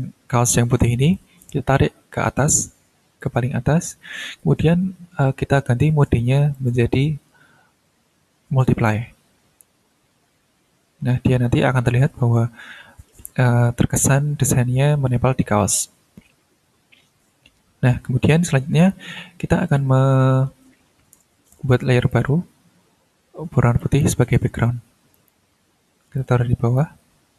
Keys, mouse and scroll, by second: 1.1-3.4 drag, 4.7-5.2 ctrl+scroll down 2, 5.5-5.8 ctrl+scroll up 2, 6.5 click, 8.6 click, 10.1 ctrl+scroll down 2, 10.6-11.0 ctrl+scroll up 2, 15.1-15.8 ctrl+scroll down 2, 16.3-17.0 ctrl+scroll down 4, 18.8 click, 21.7 click, 23.8 click, 25.1 click, 26.1-26.9 drag.